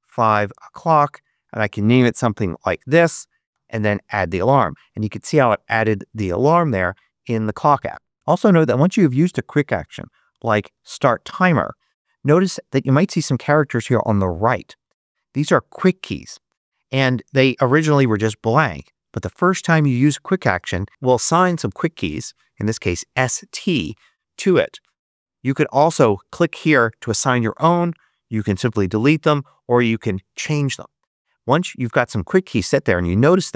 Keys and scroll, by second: 0.1 shift+0, 1.1 Tab, 1.8 shift+Tab, 1.8-2.8 typing, 3.4 Return, 9.5-11.1 typing.